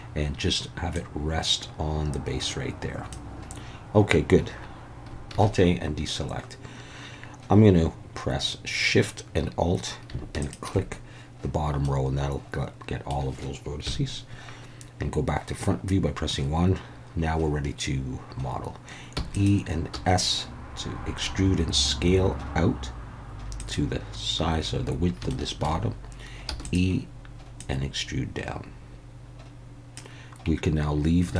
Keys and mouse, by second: 0.9-3.1 drag, 5.3 alt+a, 10.4 alt+shift+click, 11.8-13.1 middle drag, 13.8 KP_1, 19.1 e, 19.3 click, 19.9 s, 23.6 click, 25.3 shift+middle click, 26.5 e, 26.6 click, 27.6-30.0 drag.